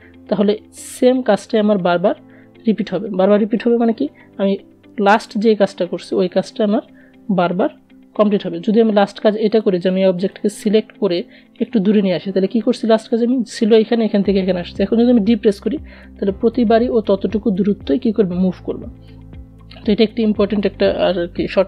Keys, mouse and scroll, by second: 7.9-13.7 drag, 13.7 ctrl+d, 15.3 ctrl+z.